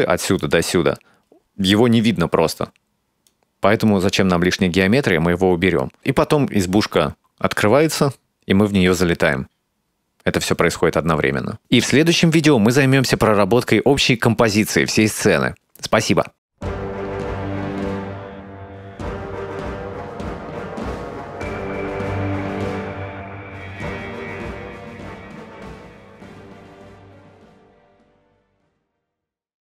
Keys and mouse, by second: 0.5 click, 3.3-11.6 drag.